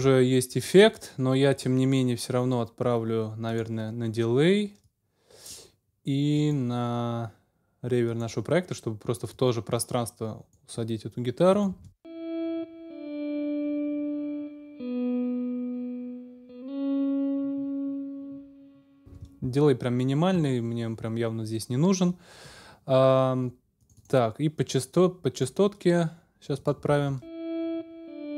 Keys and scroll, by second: 11.7 space, 19.0 space, 26.9 space.